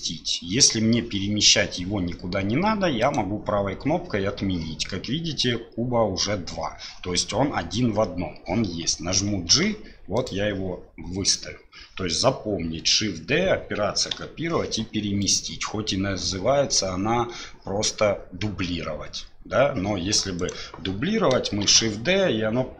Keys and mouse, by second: 9.5 g, 14.1 Delete, 15.2-19.8 drag, 20.4 click, 21.6 shift+d.